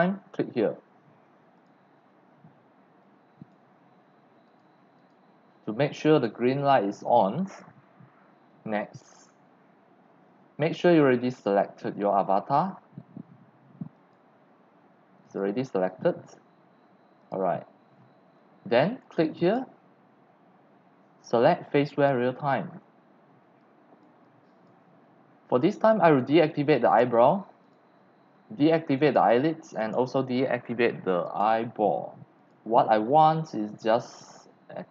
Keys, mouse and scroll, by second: 1.5 click, 3.0 click, 4.4 click, 5.0 click, 10.2-10.5 scroll, 14.0 click, 15.2 click, 17.2 click, 18.2 scroll down 2, 18.4 scroll, 19.8 click, 21.9 click, 22.9 click, 23.5 x, 23.6 click, 24.2 click, 24.9 click, 25.5 x, 25.6 click, 25.9 c, 26.0 click, 26.9 click, 27.6 click, 29.0 click, 29.7 click, 31.3 click, 32.5 click.